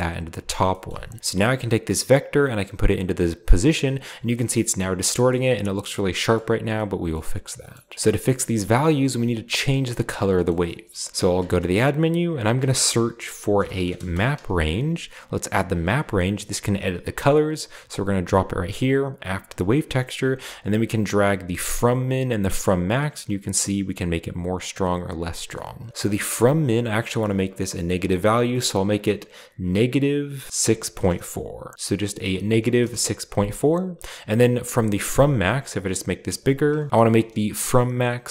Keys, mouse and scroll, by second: 1.6 click, 1.8-3.7 drag, 3.8-4.3 middle drag, 3.8-4.5 scroll up 1, 4.5-5.2 scroll down 1, 5.3-5.8 scroll up 1, 6.2-8.0 scroll down 2, 6.5-8.0 middle drag, 8.0 ctrl+b, 8.0-9.5 scroll up 1, 9.2 click, 11.4 shift+a, 12.5-14.3 typing, 15.8-16.9 drag, 17.9-19.0 drag, 19.5-19.9 scroll up 1, 20.5-25.5 shift+drag, 25.9-26.7 scroll up 1, 26.9 click, 27.7 click, 31.7-32.4 typing, 32.8 Return, 35.0-36.9 drag, 36.9 typing.